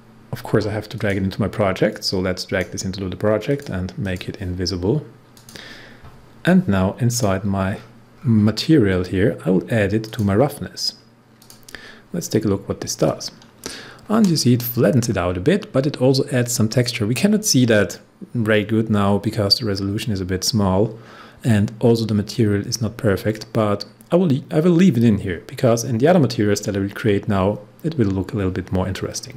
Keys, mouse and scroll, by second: 0.9-3.4 drag, 7.6 scroll down 1, 10.0 click, 11.4 click, 12.6 scroll up 1.